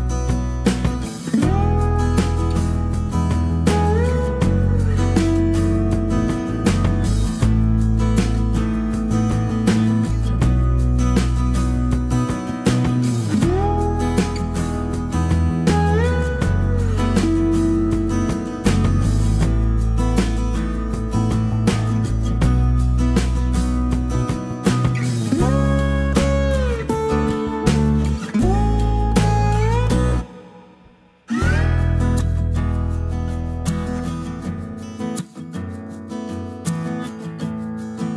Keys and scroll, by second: 2.1 b, 2.4 s, 3.4 space, 11.3 b, 17.6 ctrl+-, 17.9-19.1 typing, 24.0 space, 25.0 b, 37.1 g.